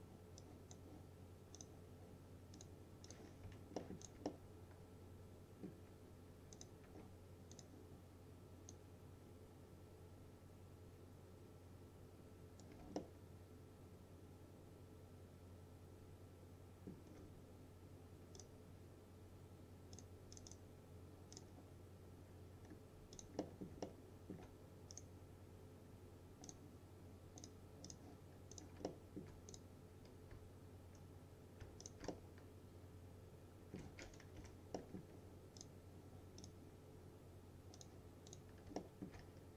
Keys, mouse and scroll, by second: 3.5 F4, 3.9 middle click, 4.1 click, 4.3-5.9 alt+middle drag, 6.6 click, 7.6-13.1 drag, 9.1-12.8 drag, 13.1-17.1 alt+middle drag, 18.4 click, 22.7-23.2 scroll up 2, 23.2 click, 23.5 middle click, 24.2-24.5 alt+middle click, 25.0 right click, 26.5 click, 28.9-29.5 alt+middle click, 29.6 click, 31.9 shift+click, 32.2-34.0 alt+middle drag, 34.4 Delete, 34.8 middle click, 35.6 click, 38.8 alt+middle click.